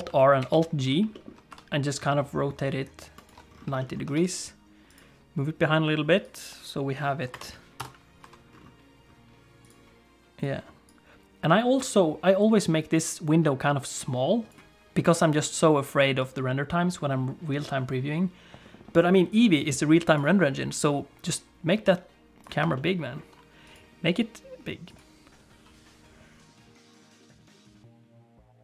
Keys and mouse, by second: 0.1 alt+r, 0.4 alt+g, 1.1 shift+middle click, 1.5 r, 3.8 shift+middle click, 4.1 g, 6.3 click, 7.3 shift+F5, 7.8 KP_0, 8.2 t, 9.6 click, 10.5 click, 12.4-14.5 drag, 16.3-20.1 drag, 20.7 click, 22.0 click, 22.9 ctrl+middle click, 23.8-25.2 drag, 27.7 shift+middle click, 28.0 middle click.